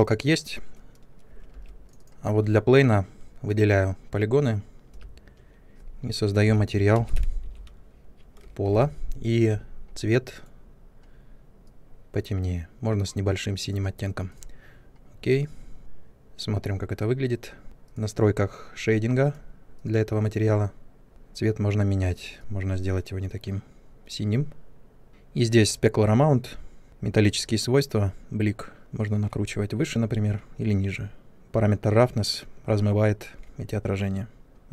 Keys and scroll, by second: 1.5 3, 4.9 m, 6.4-6.9 typing, 8.6 typing.